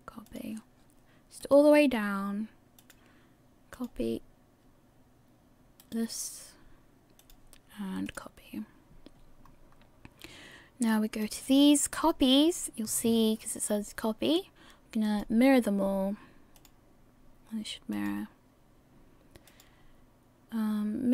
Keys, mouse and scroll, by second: 1.7 right click, 2.8 click, 6.1 right click, 7.2 click, 9.4-10.3 scroll up 2, 11.2 click, 15.0 click, 17.9 click.